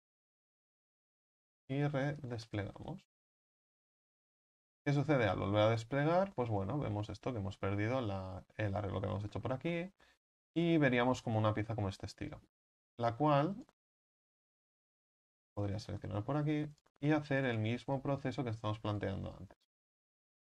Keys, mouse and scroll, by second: 0.0 a, 0.2 a, 2.5 u, 12.4 s, 13.6 right click, 15.6 s, 16.8 right click, 18.0 s, 18.9 right click, 19.9 s.